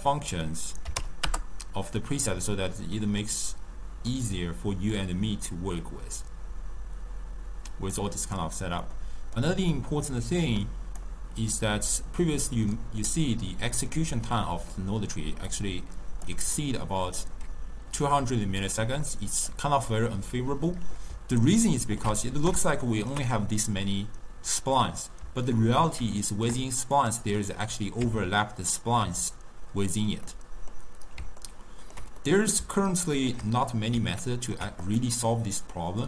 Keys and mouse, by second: 2.5-5.1 middle drag, 5.1-8.1 drag, 8.9-10.7 middle drag, 10.7 click, 12.3-15.6 middle drag, 15.6 click, 19.2-27.1 middle drag, 27.1 click, 28.2 Tab, 29.3 Tab, 30.4-35.0 middle drag, 35.0 click, 35.9 middle click.